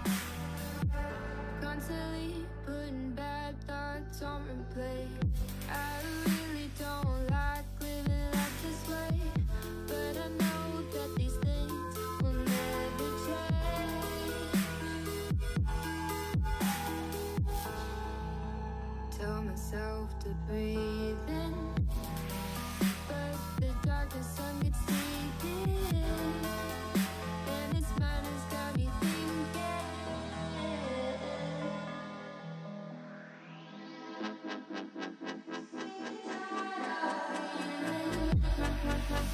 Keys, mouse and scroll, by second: 0.1 Tab, 0.3 click, 1.0 Tab, 1.5 a, 2.3 KP_3, 2.7 g, 4.1 shift+middle drag, 4.3 scroll up 1, 4.5 shift+middle click, 4.9-5.5 scroll up 3, 5.5 r, 6.6 g, 8.1-8.8 scroll down 6, 8.3 middle click, 8.8-10.2 middle drag, 10.4 click, 11.4 click, 12.6 click, 13.8-14.5 middle drag, 14.5-15.0 click, 14.6 click, 14.7 click, 15.2 click, 15.6 click, 16.1 KP_1, 16.5 shift+middle click, 16.7 scroll up 1, 17.0 g, 19.3 click, 20.1 g, 21.7 scroll down 1, 21.9-23.3 middle drag, 23.6-24.4 scroll up 1, 24.4 g, 26.5 click, 26.7 scroll down 2, 26.8-27.2 middle drag, 27.2 scroll down 1, 27.6 Tab, 27.7 click, 27.9 middle click, 28.3 scroll up 2, 28.7-29.9 shift+middle drag, 29.9 shift+a, 31.5 KP_3, 31.6 Tab, 32.3 a, 32.4 g, 33.8 s, 34.5 g, 35.0-35.5 scroll up 6, 35.2 drag, 35.2 shift+middle click, 35.5 alt+z, 35.7 click, 35.7 shift+middle click, 36.2 s, 36.9 s, 38.4 s, 39.2 s.